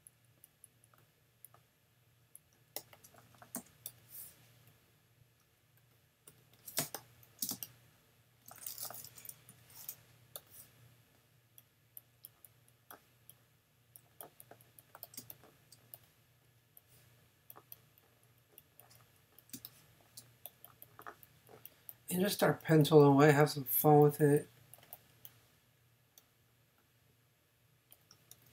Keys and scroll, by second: 3.6 super+v, 4.1 v, 5.4 x, 6.3 super+x, 6.8 super+space, 9.5 p, 15.2 space, 19.5 space.